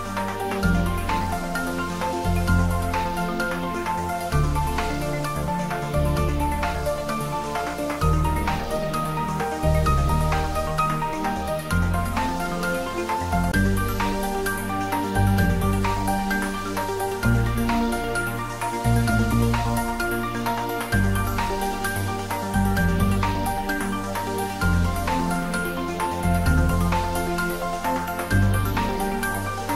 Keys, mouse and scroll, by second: 0.6 right click, 1.6 click, 2.4 scroll up 1, 2.9-4.2 middle drag, 5.5 click, 5.8 Tab, 6.5-7.4 scroll up 1, 7.4 click, 10.2 z, 12.2 x, 12.9 click, 13.2-13.5 scroll down 1, 13.5-15.4 middle drag, 15.5-15.8 scroll up 1, 16.0 ctrl+z, 16.6-17.2 scroll down 1, 17.5-19.4 middle drag, 19.4 x, 19.8 click, 20.3-22.8 middle drag, 24.3 ctrl+r, 24.9 click, 28.6 click, 29.0 scroll up 1, 29.4-29.7 middle drag.